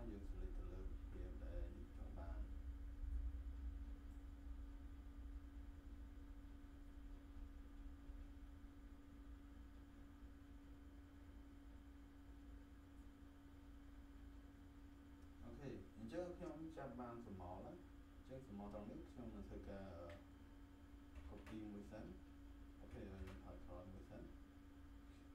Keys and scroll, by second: 21.2 ctrl+j, 23.1 ctrl+z.